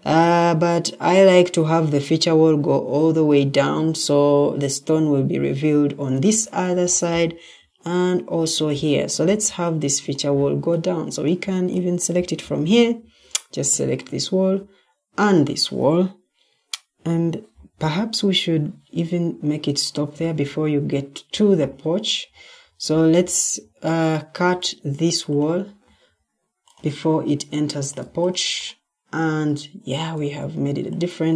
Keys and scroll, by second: 12.9 Escape, 20.5 Escape, 30.0 Escape.